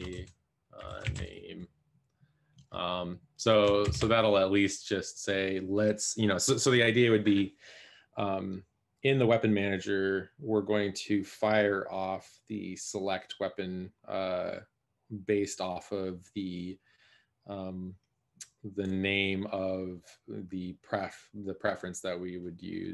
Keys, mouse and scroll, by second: 0.0-0.9 typing, 1.1 Left, 1.2 Left, 2.6 Left, 3.2 Left, 4.1 ctrl+..